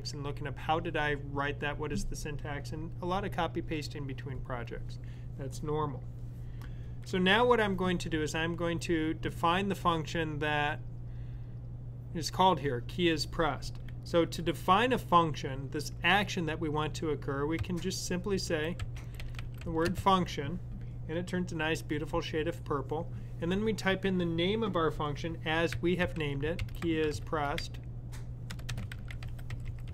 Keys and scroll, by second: 17.9-19.9 typing, 25.5-29.9 typing.